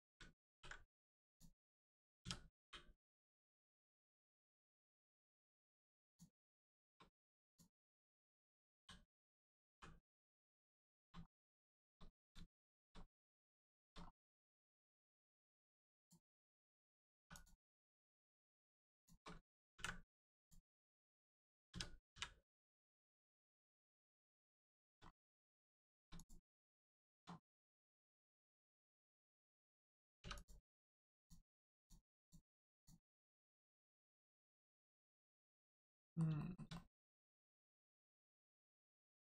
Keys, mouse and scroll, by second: 0.5 ctrl+e, 1.2 click, 2.6 u, 4.0 click, 4.6-5.0 scroll down 1, 5.2 shift+middle click, 5.6 scroll down 1, 6.0 click, 6.6 shift+middle click, 7.4 click, 7.5 click, 8.8 l, 9.7 g, 10.5 click, 10.8 shift+middle click, 11.2 scroll up 1, 11.7 shift+middle click, 13.1 middle click, 13.2 middle click, 13.6 shift+middle click, 14.0 scroll up 1, 14.6 middle click, 14.9 scroll up 1, 15.4 shift+middle click, 16.0 click, 18.2 click, 19.0 shift+click, 19.8 ctrl+e, 20.4 click, 20.7-21.7 scroll down 1, 21.7 a, 22.1 u, 23.2 click, 24.2 shift+middle click, 25.1 scroll up 1, 25.8 shift+middle click, 26.2 click, 27.0 shift+middle click, 27.4 scroll down 1, 28.0 middle click, 28.5 shift+middle click, 28.9 middle click, 30.4 click, 32.7 click, 33.8-34.1 scroll down 1, 34.2 middle click, 36.4 shift+middle click, 36.7 middle click, 36.8 middle click, 37.0-37.9 scroll up 1, 38.4 middle click, 38.9 shift+middle click.